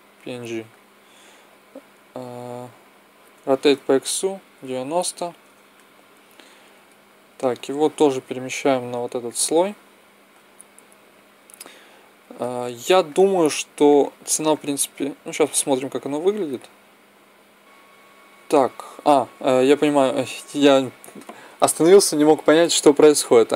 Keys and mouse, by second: 0.0-1.4 drag, 3.3 r, 6.3-8.2 drag, 8.3 m, 13.8-17.1 drag, 21.1-23.5 middle drag.